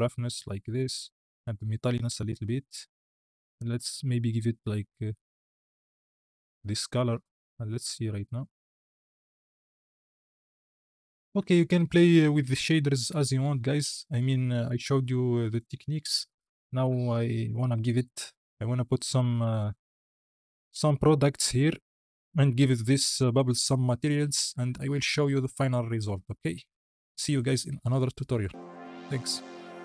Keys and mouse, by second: 1.0-3.1 drag, 3.4 click, 7.9 click, 8.5 space, 11.3 space, 14.6 KP_Decimal, 20.3 z, 20.9 click, 21.4 drag, 22.0 click, 22.6 z.